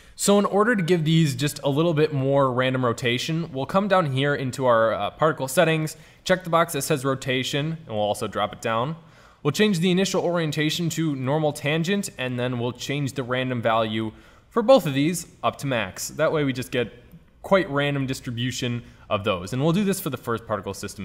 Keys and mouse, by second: 1.1 middle click, 2.0 middle click, 6.4-9.3 drag, 19.8-20.8 middle drag.